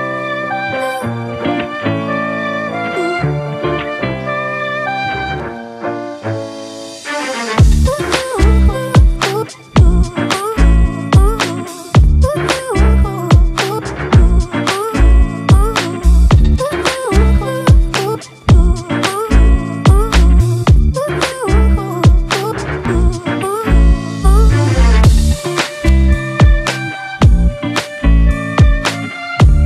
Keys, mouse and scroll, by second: 7.3 right click, 10.3-11.9 typing, 12.3 double click, 14.0 ], 14.3 ], 15.7 double click, 23.0 ], 24.2 double click, 25.3 ], 25.6 double click, 28.2 ], 28.5 double click.